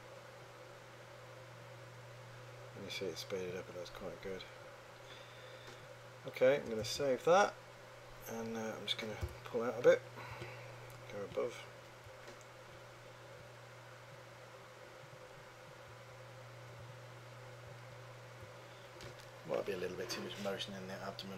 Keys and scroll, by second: 7.9 super+s, 9.4 h, 10.8 3, 16.1 1, 17.9 1.